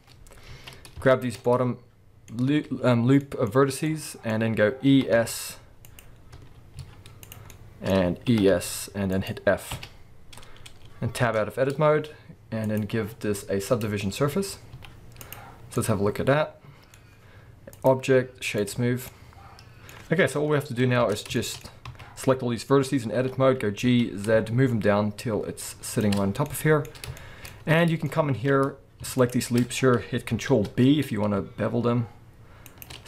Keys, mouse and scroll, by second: 0.1-0.5 scroll up 1, 0.5 alt+a, 1.1 alt+shift+click, 1.4-6.0 middle drag, 4.9 e, 6.0 click, 6.8 z, 7.5-9.3 middle drag, 8.3 e, 9.3 click, 9.7 f, 10.4-11.2 scroll down 2, 11.2 Tab, 11.6-12.6 scroll down 2, 12.6-15.8 drag, 14.7 z, 15.8-17.8 middle drag, 17.0-17.8 scroll up 2, 17.8-19.1 drag, 19.1-26.0 middle drag, 20.3 KP_1, 20.8 scroll up 1, 21.0 Tab, 21.7 scroll up 1, 21.9 a, 23.2 g, 26.0 shift+click, 26.2 scroll down 1, 26.4-29.2 middle drag, 26.9 scroll up 1, 28.3 alt+a, 29.2 alt+shift+click, 30.5 ctrl+b, 32.8 shift+click.